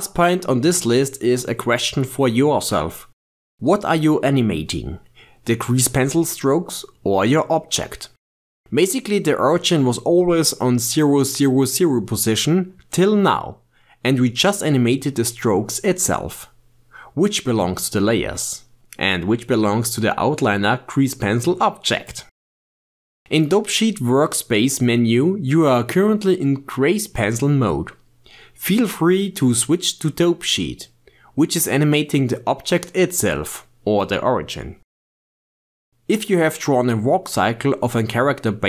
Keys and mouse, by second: 3.9-7.3 drag, 7.3 ctrl+z, 7.5 ctrl+z, 8.6 ctrl+Tab, 10.7 n, 12.3 shift+space, 14.4 g, 16.5 ctrl+z, 17.8-22.9 drag, 28.5-31.4 drag, 32.1-33.1 shift+middle drag, 33.1-34.6 drag, 34.6 g.